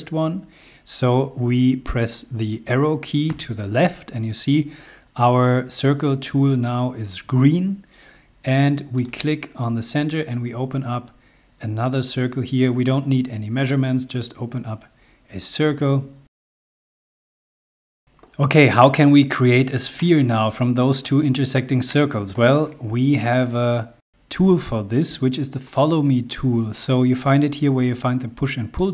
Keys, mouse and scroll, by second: 3.4 Left, 9.1 click, 16.5 click, 17.4 space, 18.6 scroll up 1, 19.9 middle click, 25.7 click, 28.8 click.